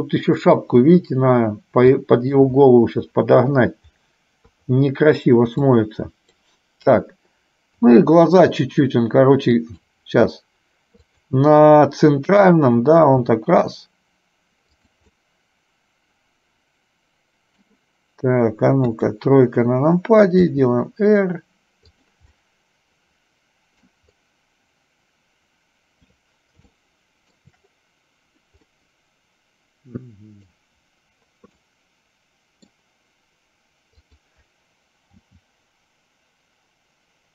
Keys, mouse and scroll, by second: 2.0 shift+middle click, 4.7 KP_3, 5.9 click, 7.9 r, 11.3 click, 13.2 r, 15.3-17.7 middle drag, 17.7 scroll down 1, 19.0 KP_3, 22.5-24.0 middle drag, 26.8 shift+middle click, 28.9-30.7 middle drag, 31.7-32.9 middle drag, 34.0 click, 35.4 g.